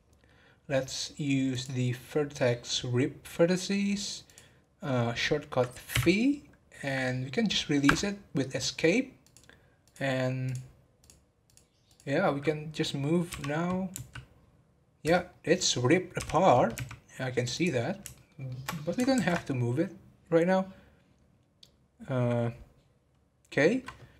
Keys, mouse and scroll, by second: 0.6-1.5 scroll up 3, 1.5-4.3 drag, 9.2 click, 9.8-11.0 drag, 11.4 click, 12.3 scroll up 2, 13.3 g, 16.1 g, 17.8 scroll down 4, 18.1-19.1 shift+middle drag, 19.1 ctrl+z.